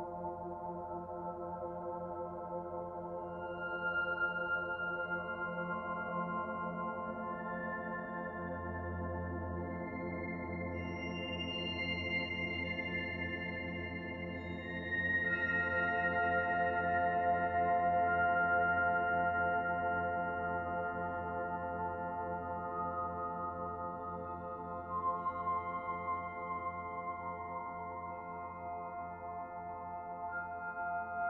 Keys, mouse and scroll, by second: 0.9 middle click, 2.0 Tab, 2.3-2.7 scroll down 5, 2.7 middle click, 3.4 shift+middle click, 4.0 middle click, 8.2 middle click, 8.8-11.2 scroll down 2, 11.8 click, 13.5 s, 17.3-17.7 scroll up 3, 17.7 middle click, 18.6 click, 19.9 middle click, 21.1 click, 24.4 click, 25.7 click, 27.0 middle click, 27.8 shift+middle click, 28.3 middle click, 29.2-29.5 scroll up 2, 29.5 shift+middle click, 30.7 click.